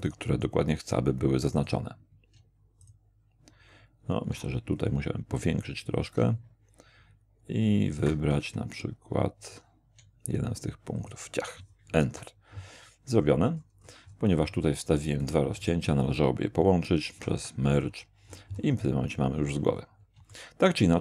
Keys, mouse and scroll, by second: 0.0 shift+click, 1.6 click, 2.8 shift+click, 4.7-5.8 shift+scroll up 2, 11.0 click, 12.0 Return, 13.2-14.6 scroll up 4, 15.2 middle click, 15.6 shift+middle click, 17.1 alt+m, 17.8 alt+click, 18.8-20.2 alt+scroll down 7, 20.3 shift+middle click.